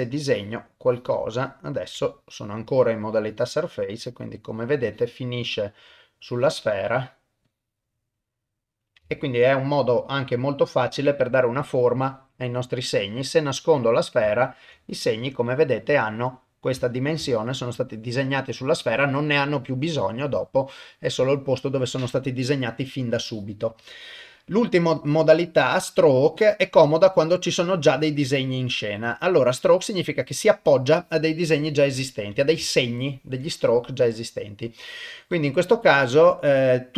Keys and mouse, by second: 0.3 click, 0.9 click, 1.3 middle click, 2.1 shift+middle click, 3.2 click, 4.0 click, 4.9 click, 5.5 shift+middle click, 6.3 click, 6.9 click, 7.5 click, 8.2 middle click, 9.1 ctrl+middle click, 9.5-11.5 middle drag, 11.7 shift+middle click, 12.2 middle click, 14.0 click, 14.4 ctrl+middle click, 14.8-16.7 middle drag, 16.9 ctrl+middle click, 17.3 shift+middle click, 18.8 click, 23.8-31.0 drag, 32.7 shift+middle click, 33.5-34.6 middle drag, 35.3-36.9 drag.